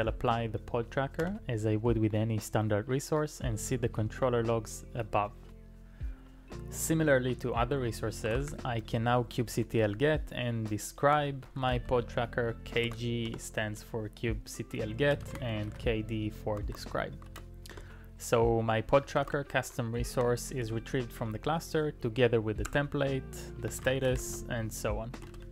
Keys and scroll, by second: 1.2 typing, 8.3 ctrl+a, 8.5 typing, 9.5-12.3 typing, 12.9 ctrl+e, 13.3 Return, 14.9-16.1 typing, 17.3 ctrl+e, 17.7 Return, 19.3 ctrl+a, 19.4 [, 20.6 ctrl+u, 22.7-25.5 typing.